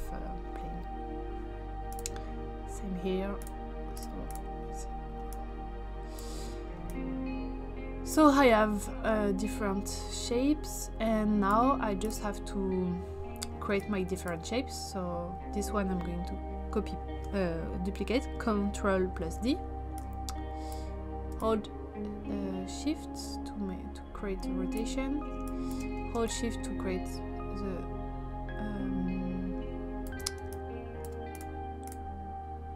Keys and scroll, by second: 19.2 ctrl+d, 25.4 space.